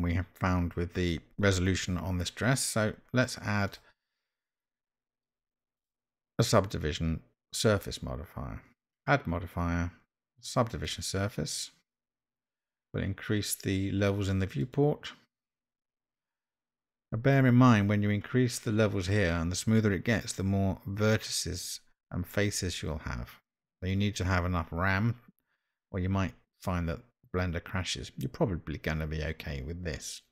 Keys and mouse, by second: 5.8 click, 7.6-11.0 drag, 14.6 click.